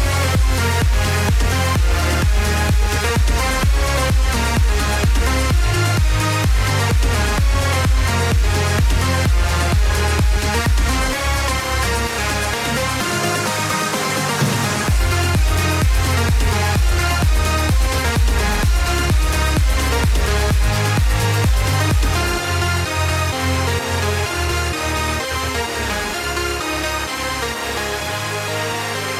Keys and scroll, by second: 6.0 ctrl+-.